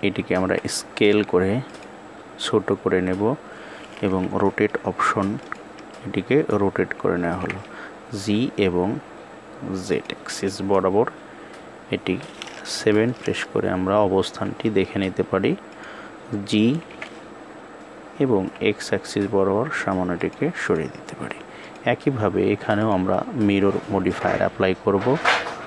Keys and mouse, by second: 10.0 click, 12.4 KP_7, 16.5 g, 21.3 click, 22.6-23.9 drag.